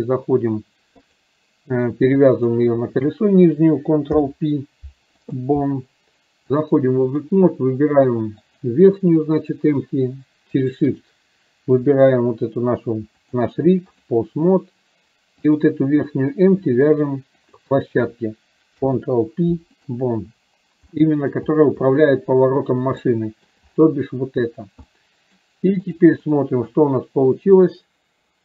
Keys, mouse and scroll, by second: 1.1 click, 2.6 click, 6.6-7.5 drag, 8.6 click, 10.7 shift+click, 13.3 click, 15.6 click, 21.1 middle drag, 23.2 shift+middle click, 25.0-25.5 middle drag, 25.1-25.4 drag, 26.0 drag, 26.5-26.8 middle drag, 27.6-28.4 drag.